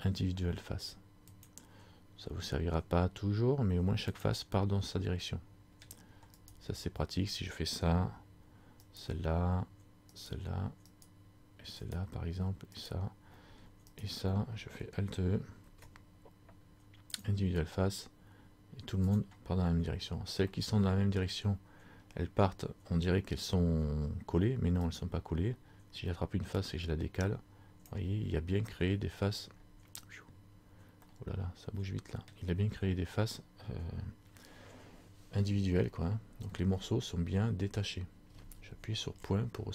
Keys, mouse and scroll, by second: 5.1 middle click, 6.5 right click, 8.9 shift+right click, 15.8 alt+e, 19.3 click, 19.7 scroll down 1, 20.6 scroll down 3, 20.7 middle click, 20.7 scroll up 1, 21.7-23.2 scroll up 3, 25.0 right click, 26.7 click, 28.7-29.0 scroll up 1, 29.0 middle click, 29.4 scroll down 1, 30.4-31.2 scroll down 4, 31.2 middle click, 31.2 scroll up 1, 32.5 scroll down 1, 36.6-36.9 scroll up 1, 37.6-39.2 scroll down 1, 39.2 scroll down 1, 39.2 KP_Decimal.